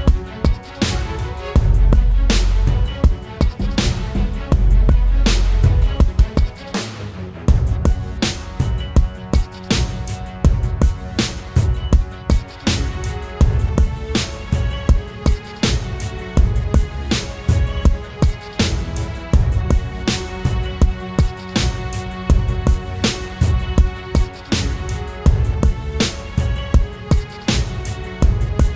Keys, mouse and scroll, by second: 2.2 ctrl+t, 3.7 ctrl+click, 5.8 Return, 5.8 ctrl+click, 8.7 Up, 8.9 Left, 9.2 Left, 10.1 Up, 10.7 Left, 10.9 Up, 12.9 double click, 20.1 alt+scroll down 1.